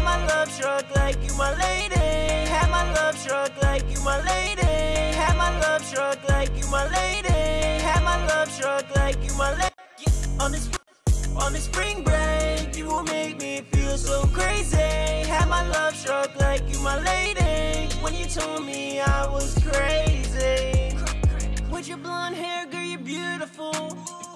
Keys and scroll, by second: 0.8-1.9 typing, 5.9 Return, 6.7 ctrl+super+w, 9.9-10.6 typing, 12.5 super+s, 21.2 b, 23.3 super+s, 23.5 e.